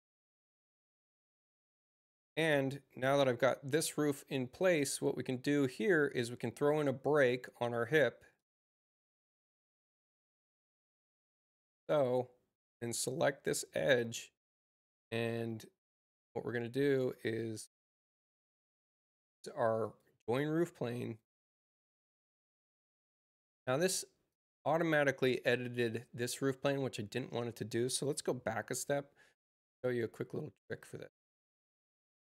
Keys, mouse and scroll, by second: 3.9 click, 7.6 u, 8.3 click, 13.0 click, 19.7 click, 20.9 click, 23.4 middle click, 23.5 click, 23.5 right click, 24.2 click, 30.6 ctrl+z.